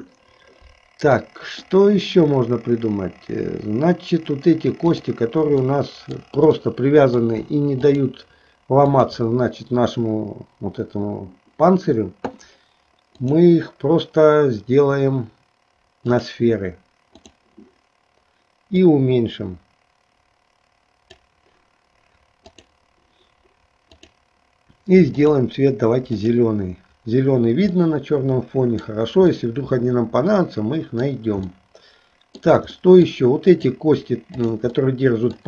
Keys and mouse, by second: 1.2 middle click, 5.8 middle click, 6.8 middle click, 8.1 shift+click, 9.0 shift+click, 13.2-16.5 drag, 17.4 click, 18.8-21.3 drag, 22.6 click, 24.0-25.5 drag, 26.3 click, 27.8-29.0 middle drag, 29.5-31.3 middle drag, 31.7 shift+middle click, 32.9 middle click, 33.7 click, 34.6 shift+click, 35.0 middle click.